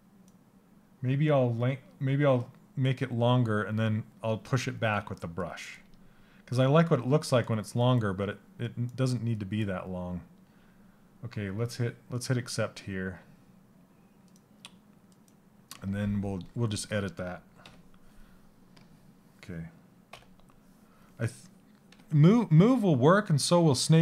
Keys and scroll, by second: 18.8 l.